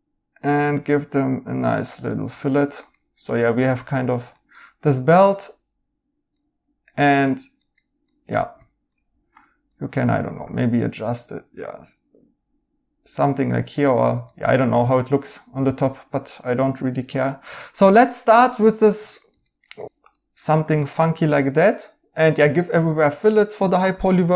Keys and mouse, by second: 2.0 right click, 4.5 right click, 6.8 right click, 8.2-9.0 typing, 13.7 right click, 17.2 right click, 22.7 right click.